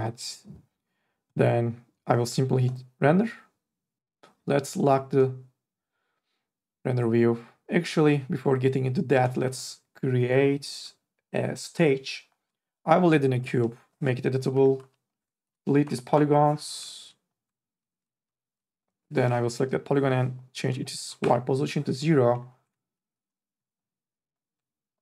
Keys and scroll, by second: 14.5 c, 14.8 3, 15.4 Delete, 18.2 Delete, 21.0 KP_0, 21.3 Return, 23.5 2.